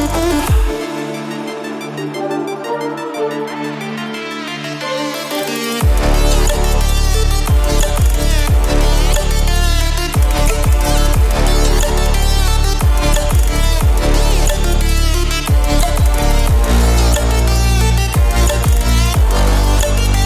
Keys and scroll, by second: 0.5 ctrl+space, 1.0 ctrl+space, 3.8 ctrl+space, 5.8 c.